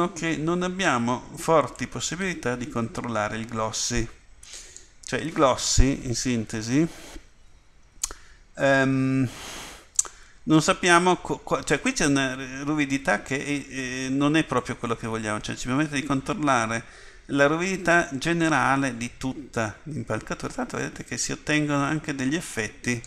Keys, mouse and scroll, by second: 14.9 click.